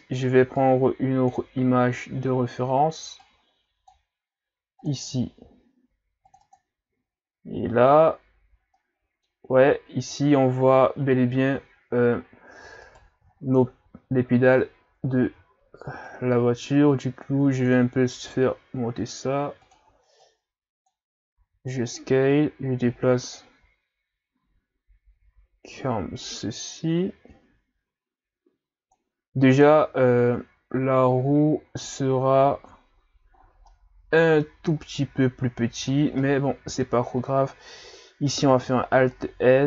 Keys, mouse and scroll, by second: 0.6-5.3 drag, 6.6 click, 7.3-8.8 scroll up 4, 8.8-11.8 middle drag, 12.2-12.9 scroll up 2, 12.9 right click, 13.3-13.8 scroll up 1, 14.8-15.2 scroll down 1, 15.2 Tab, 16.1-18.3 drag, 18.3 s, 20.3-21.4 drag, 21.4 s, 22.3-25.3 drag, 33.4-33.7 scroll down 5, 33.7-34.8 middle drag, 34.8-35.8 scroll up 1, 35.8-36.2 scroll up 3, 36.2 middle click, 37.0-38.5 scroll up 2, 38.5 scroll up 1, 38.5 alt+s.